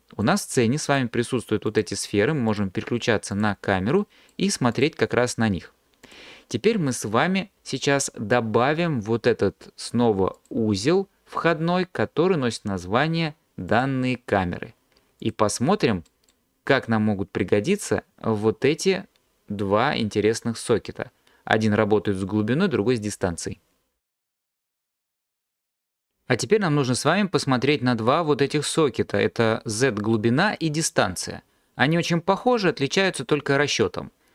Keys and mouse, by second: 0.9 click, 1.7 click, 2.5 click, 3.3 click, 4.7 click, 10.5-13.9 drag.